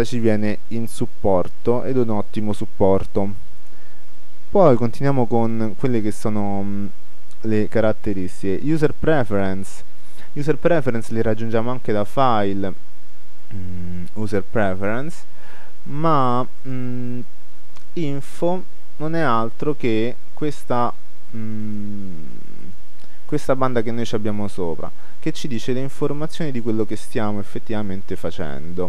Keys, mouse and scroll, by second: 4.4-5.4 drag, 12.4-13.8 drag, 16.7-18.4 drag, 21.7-23.4 drag, 24.7-27.8 drag, 27.8-28.8 middle drag.